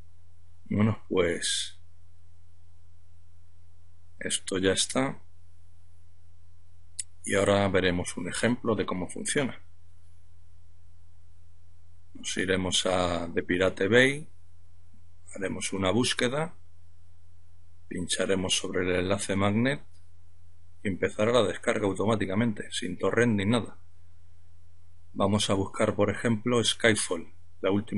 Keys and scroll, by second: 22.4 F12.